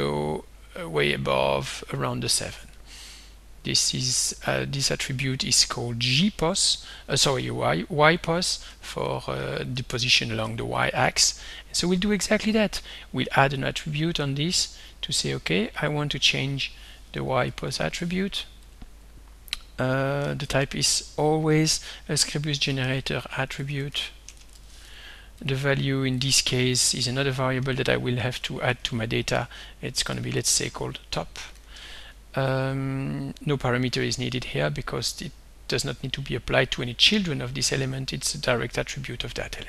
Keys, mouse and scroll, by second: 2.8-5.1 drag, 8.7 Down, 9.0 Up, 9.7 Down, 10.4 Up, 13.3 right click, 14.6 click, 15.8 click, 16.6 click, 17.2-18.2 typing, 18.6 click, 20.0-21.5 typing, 22.8-25.2 typing, 25.4 click, 26.2 click, 27.7-31.5 typing, 34.0 click, 36.8 click.